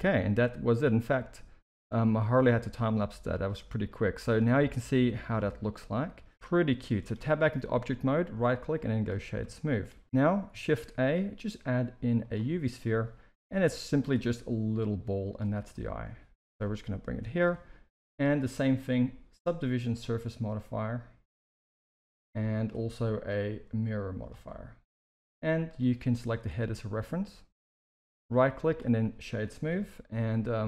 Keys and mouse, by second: 0.7-6.1 middle drag, 6.8 shift+middle click, 7.6 Tab, 8.5-9.0 right drag, 9.5 shift+middle drag, 10.0 alt+a, 10.6 shift+a, 13.3 g, 14.2 s, 15.7-16.1 middle drag, 16.4 g, 18.2-22.0 drag, 22.6-24.2 drag, 25.6 click, 26.6 middle drag, 28.3 right click, 29.7 KP_1, 30.4 s.